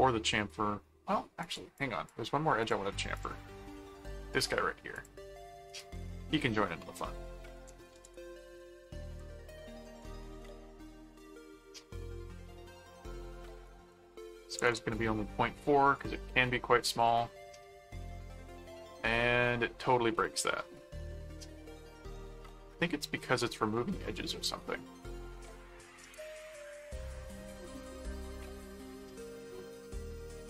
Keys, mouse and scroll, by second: 1.4 click, 2.6 click, 4.9 click, 5.7 right click, 6.5 middle click, 7.4-8.5 typing, 9.6-11.0 typing, 13.6 click, 16.0 click, 17.0 click, 18.4 middle click, 20.3 click, 20.8 middle click, 21.8 middle click, 22.7 middle click, 24.1 middle click, 25.0 click, 27.5 click, 28.2 right click, 29.1-30.4 middle drag.